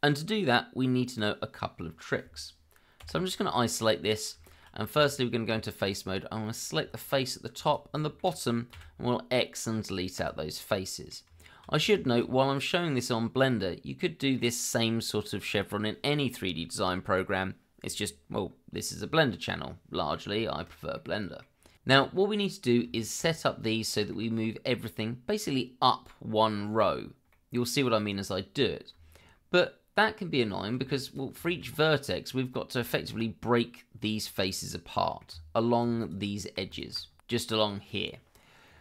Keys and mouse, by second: 3.0 KP_Divide, 4.0 middle drag, 4.4 shift+middle drag, 4.9 Tab, 5.8 click, 6.4 middle click, 6.9 shift+middle click, 7.6 shift+click, 7.9 shift+middle click, 8.7 x, 10.7 middle click, 11.2 Tab, 11.9 shift+middle drag, 12.5-14.4 middle drag, 18.9-20.1 middle drag, 20.4 shift+middle click, 20.9-21.4 middle drag, 22.2-22.7 middle drag, 22.9 shift+middle drag, 23.6-24.1 middle drag, 27.3 middle drag, 28.9 Tab, 31.1 click, 31.4 shift+middle click, 32.9 shift+middle click, 34.9 middle click, 35.3 Tab, 36.0 click, 36.7 alt+click, 38.6 middle click.